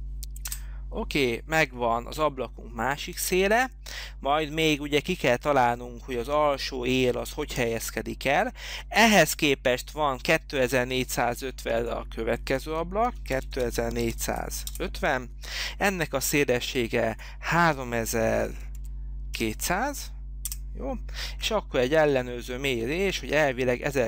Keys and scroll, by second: 0.7 Delete, 13.0-14.7 typing, 14.9 Return, 18.3-19.4 typing, 20.6 Return.